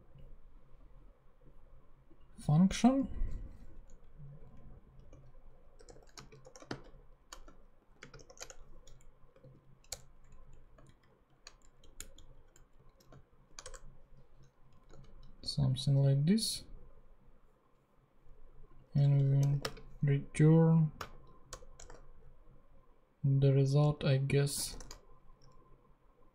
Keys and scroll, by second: 3.0 Down, 4.0 Up, 5.0 shift+Up, 5.5-6.4 typing, 7.8 shift+., 8.0 shift+space, 8.1 shift+[, 8.3 shift+Return, 9.3 shift+super+Return, 9.4 shift+super+z, 9.8 super+Return, 10.2 Down, 10.8 alt+shift+Up, 11.6 alt+shift+Down, 11.8 Left, 12.1 Left, 12.5 Down, 12.7 Right, 13.2 alt+shift+Left, 13.6 alt+shift+BackSpace, 14.5 shift+BackSpace, 14.8 Up, 15.0 super+x, 18.8-19.9 typing, 20.2 super+space, 21.0 super+Right, 21.4 super+BackSpace, 21.8 ;, 24.7 shift+super+p.